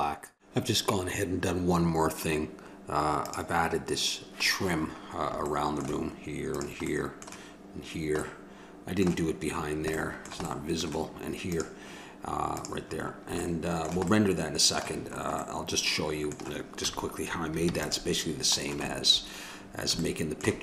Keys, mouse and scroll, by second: 3.2 click, 4.1 middle click, 4.7 click, 5.5-8.2 middle drag, 8.2 click, 8.3 middle click, 11.4 right click, 12.2-13.5 drag, 13.5-14.5 middle drag, 15.4-16.7 middle drag, 16.7 a, 17.6 ctrl+s.